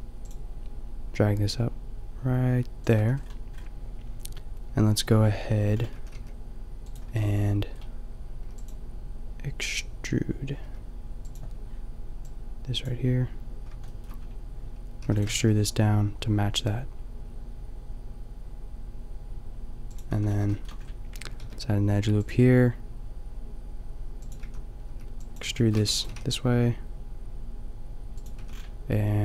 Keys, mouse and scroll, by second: 3.0 a, 4.9 middle click, 6.0 a, 6.2 g, 7.1 a, 8.4 click, 8.4 b, 10.7 b, 12.8 b, 13.8 click, 15.0 e, 15.2 click, 15.2 g, 20.0 click, 20.2 a, 21.4 ctrl+r, 24.4 a, 25.1 b, 25.5 click, 25.8 e, 26.1-27.8 drag, 26.1 g, 28.4 click, 28.4 a.